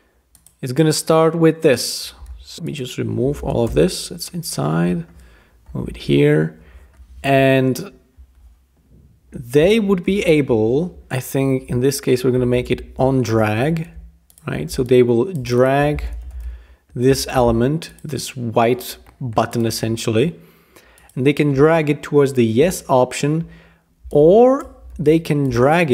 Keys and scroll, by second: 2.5 super+g, 3.4 Return, 3.6 BackSpace, 10.1 shift+l, 11.1 Return, 12.4 Up, 12.7 Page_Up, 13.0 typing, 15.8-16.9 typing, 17.1 Escape, 24.9 shift+v.